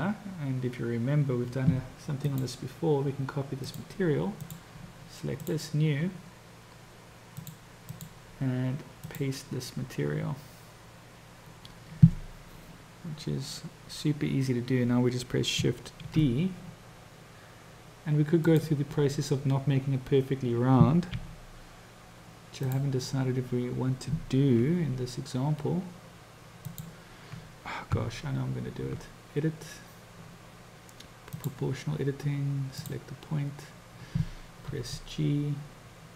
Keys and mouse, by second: 2.2-3.8 drag, 5.5-6.0 drag, 7.5 click, 7.9-9.5 drag, 16.2 shift+d, 21.3 s, 24.8 g, 28.0 Tab, 31.5 click, 32.9 click, 35.0 g.